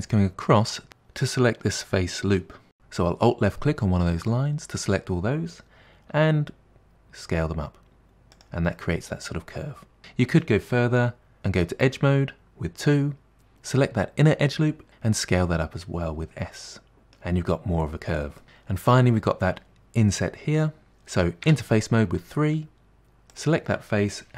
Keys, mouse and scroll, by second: 2.7 alt+click, 6.2 s, 8.8-10.0 middle drag, 11.4 2, 14.9 s, 16.9-18.1 middle drag, 20.6 middle click, 21.5 3, 23.3 click.